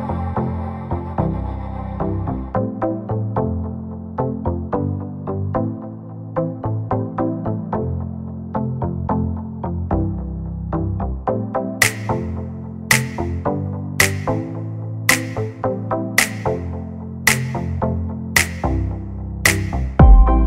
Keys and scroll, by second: 0.6 space, 4.6 m, 5.7 Up, 6.6 space, 7.7 p, 9.6 5, 10.0 Return, 10.5 space, 18.2 m, 19.0 Up, 19.6-20.4 typing.